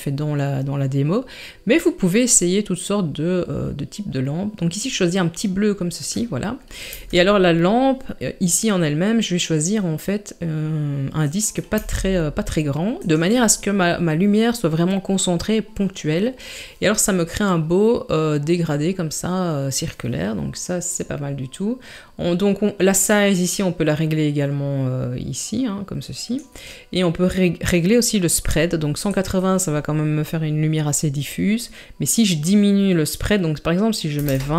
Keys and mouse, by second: 6.9 s, 11.8 g, 23.3-26.4 drag, 29.3-34.5 drag.